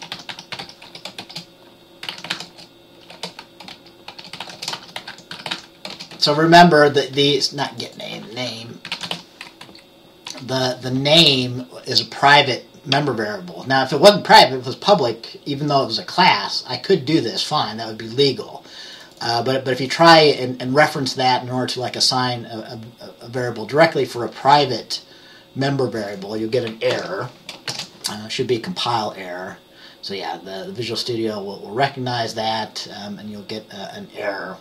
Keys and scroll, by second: 0.0-6.7 typing, 8.7-9.9 typing, 10.4 Right, 27.0 ctrl+s, 27.8 ctrl+b.